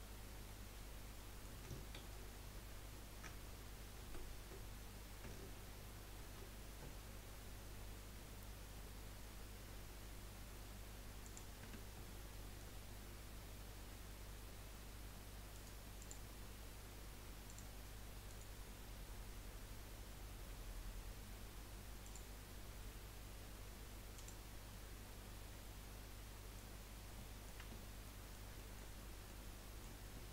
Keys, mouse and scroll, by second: 0.4-1.9 middle drag, 1.9 ctrl+z, 4.0 ctrl+z, 6.2 ctrl+b, 11.6 Tab, 12.0 scroll down 3, 12.4-12.8 middle drag, 12.8 scroll up 1, 15.5 right click, 17.4-18.3 drag, 18.3-22.0 right drag, 22.0-22.4 drag, 24.4 click, 24.7-26.7 middle drag, 26.7-27.3 scroll up 4, 27.3 middle click, 27.6 Tab, 28.0-30.3 middle drag.